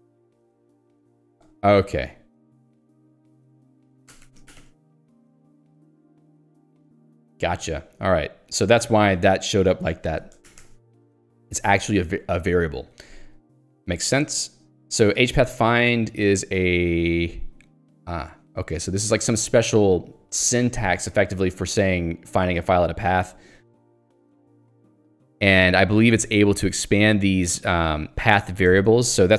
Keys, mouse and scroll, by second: 0.0-1.6 typing, 1.6 ctrl+j, 4.1 ctrl+g, 5.3-7.0 typing, 10.5 ctrl+g, 10.8 Escape, 11.8 h, 13.1 l, 18.5-21.8 typing, 23.1 k, 24.9 j, 25.5 h, 26.8 l, 28.3 h.